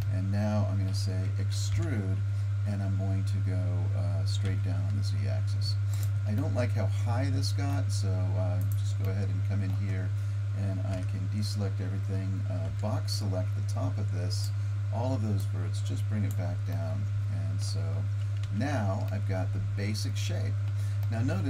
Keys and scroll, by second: 1.7 e, 10.9 a, 12.7 b, 18.5 Tab.